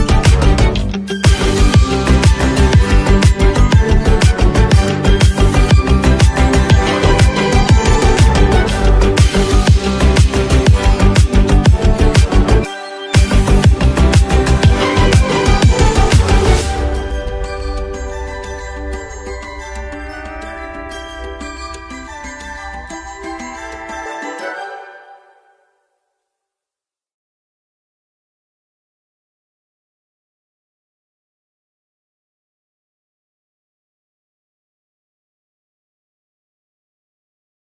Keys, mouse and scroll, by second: 0.5 space, 0.6 click, 1.0 space, 1.2-4.2 drag, 4.2 x, 4.4-7.3 drag, 8.0 click, 9.1 alt+scroll down 1, 13.0-18.0 drag, 22.1-23.9 drag, 32.0 click, 34.9 Down.